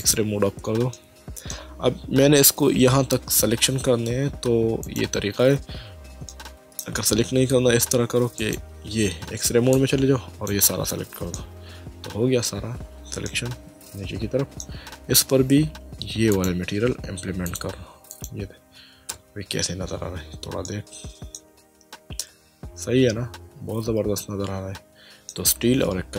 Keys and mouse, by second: 0.0 click, 0.9 shift+middle click, 4.8 click, 6.3 shift+middle click, 8.4 click, 9.7 click, 11.4 middle click, 13.3 middle click, 16.3 click, 17.5 click, 19.1 Tab, 20.7 middle click, 22.2 middle click.